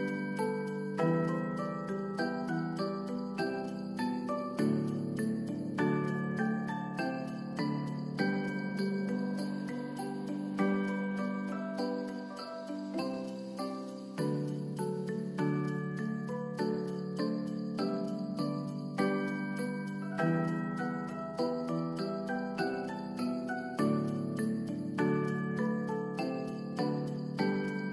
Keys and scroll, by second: 2.9 Return, 3.2 shift+f, 4.9 BackSpace, 4.9 s, 5.4 BackSpace, 5.6 Return, 14.4 space, 22.6 ctrl+s.